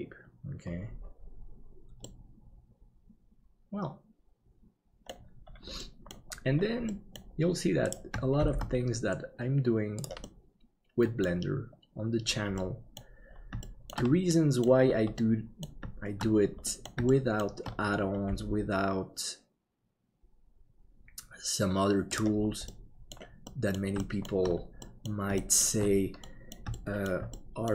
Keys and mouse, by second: 2.0-5.1 middle drag, 5.8 middle click, 6.9 middle click, 8.4 shift+d, 10.3-11.3 middle drag, 12.7 middle click, 13.7 shift+middle click, 14.4 middle click, 15.3 middle click, 16.6 middle click, 17.2 shift+middle click, 18.3 g, 22.8 middle click, 23.6 middle click, 24.1 shift+middle click, 25.0 middle click, 25.5 shift+middle click, 26.3 middle click, 26.8 shift+middle click, 27.4 middle click.